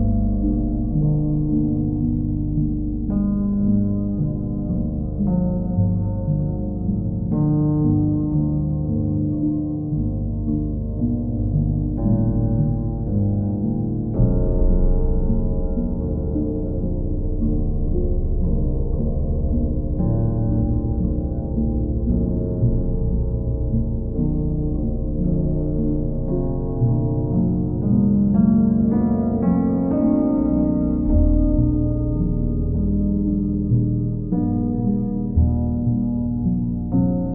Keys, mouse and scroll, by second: 0.7 right click, 1.5 click, 5.9 click, 7.1 right click, 8.2-9.4 drag, 11.7-12.9 drag, 13.1-14.2 drag, 15.6-16.6 drag, 19.0-20.1 right drag, 20.3-21.4 drag, 22.0-23.1 drag, 25.2-26.2 drag, 26.8-27.9 drag, 28.6 click, 29.9 alt+click, 32.3 ctrl+click, 32.7 alt+click, 33.4 w, 36.3-37.3 alt+drag.